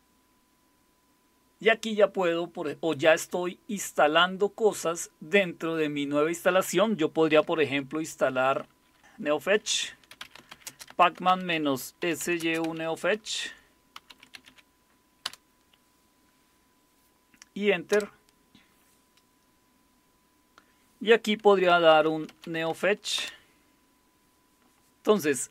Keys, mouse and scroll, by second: 9.5-14.9 typing, 15.2 Return, 17.9 Return, 21.5-22.9 typing, 23.2 Return.